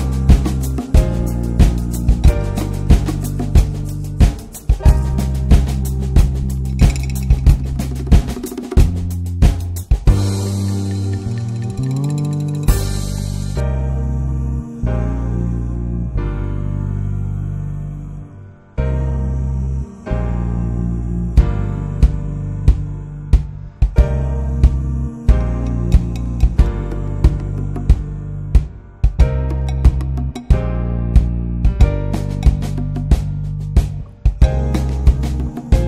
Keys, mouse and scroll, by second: 0.0-0.6 right drag, 0.6 click, 1.5 click, 1.8 scroll down 2, 2.0 middle click, 2.2-2.8 scroll up 3, 2.8-5.8 drag, 11.3 scroll down 4, 11.5 middle drag, 11.7 drag, 11.9 middle click, 12.1 scroll up 1, 12.2 middle click, 12.9-13.3 scroll up 1, 13.3-16.0 drag, 17.2 ctrl+s, 17.5-17.9 middle drag, 17.9 click, 18.3 middle click, 18.7-19.0 scroll down 11, 19.0-23.0 middle drag, 23.1-23.5 middle drag, 23.5 click, 23.6 right click, 24.1 click, 24.2 scroll down 1, 24.4-25.1 middle drag, 25.1 scroll up 1, 25.3-25.8 middle drag, 25.8 click, 26.3 middle click, 26.5-27.5 scroll up 1, 27.6-28.9 drag, 31.1 click, 31.4 scroll up 4, 31.7-33.0 middle drag, 33.0 click, 35.4 click, 35.7 middle click.